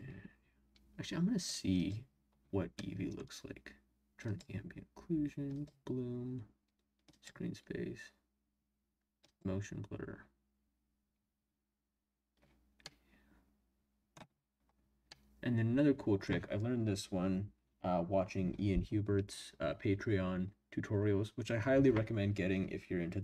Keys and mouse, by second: 1.3 click, 2.8-3.2 drag, 2.8-3.2 right drag, 4.2 click, 5.5 click, 7.1 click, 9.3 click, 12.9-14.1 middle drag, 15.1-18.5 middle drag.